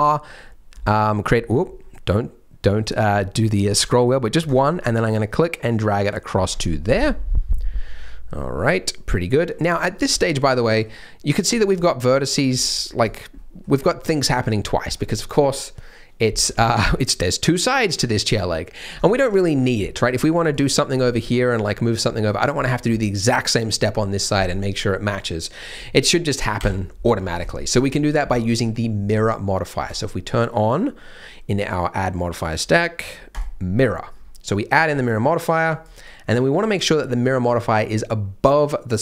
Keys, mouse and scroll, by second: 6.3-7.1 scroll up 6, 7.0 middle click, 9.3-9.7 scroll down 3, 9.7 middle click, 10.1 shift+middle click, 10.4 middle click, 10.8 scroll down 1, 11.3 middle click, 11.7 click, 12.0 middle click, 12.5 middle click, 13.0 click, 13.3 middle click, 16.6 middle click, 18.9-19.6 scroll up 1, 19.8-20.2 scroll up 3, 20.2 click, 21.0 click, 21.0 middle click, 22.0 middle click, 22.5 middle click, 22.8 scroll up 1, 23.9 middle click, 26.6 KP_7, 27.1-27.4 scroll down 4, 27.4 shift+middle click, 27.8 scroll down 2, 28.3 shift+middle click, 34.1-35.7 scroll down 5, 35.7 click, 36.0 click, 37.2 click.